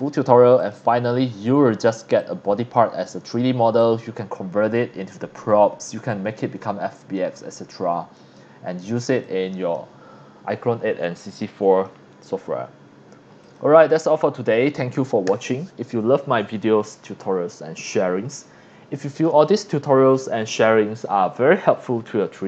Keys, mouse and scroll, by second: 0.6 click, 1.2 scroll up 1, 1.7 scroll down 1, 2.2 click, 3.0 scroll up 2, 3.3 scroll down 1, 3.8-5.0 drag, 7.5 click, 8.4 scroll up 1, 9.2 click, 10.1 scroll down 1, 11.3-11.8 drag, 13.4 click.